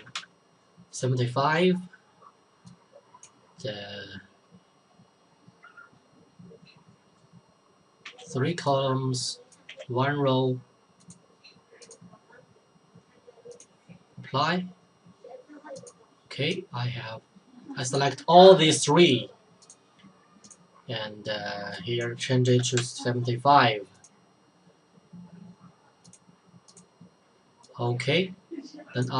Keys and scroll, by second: 0.0-0.5 typing, 8.0 typing, 9.4-10.2 typing, 22.3-23.3 typing.